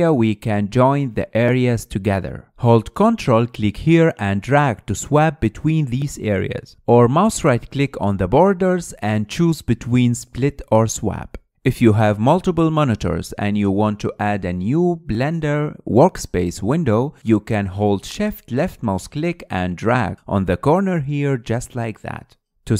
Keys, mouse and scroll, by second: 6.5-11.3 ctrl+drag, 11.3 right click, 11.6-20.1 middle drag, 20.1 shift+click, 21.5 shift+click.